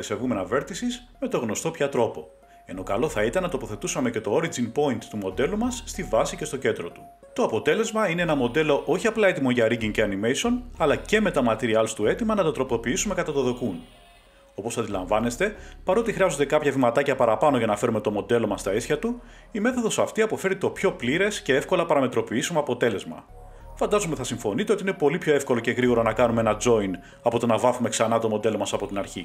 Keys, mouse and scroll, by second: 3.5 click, 5.9 a, 6.3 a, 7.6 scroll, 8.4 click, 9.3 middle click, 10.1 shift+click, 11.0 middle click, 11.5 s, 12.5 2, 13.4 middle click, 14.8 Tab, 15.9 click, 17.8 click, 19.0 click, 19.5 scroll, 21.2 scroll, 22.4 s, 23.8 1, 25.8 shift+s, 26.5 8, 27.4 click, 29.0 middle click.